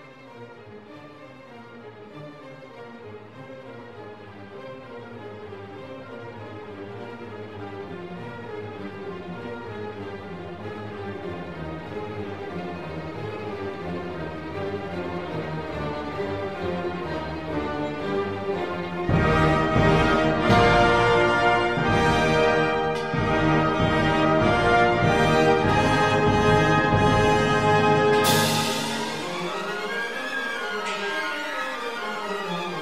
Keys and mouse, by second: 0.1 shift+d, 2.8 click, 4.0 click, 6.0-7.0 middle drag, 7.0 click, 8.4 click, 12.6 g, 13.2 g, 13.7 right click, 13.8 ctrl+s, 18.7 shift+d, 24.7 ctrl+s, 25.0 shift+b, 26.8 ctrl+s.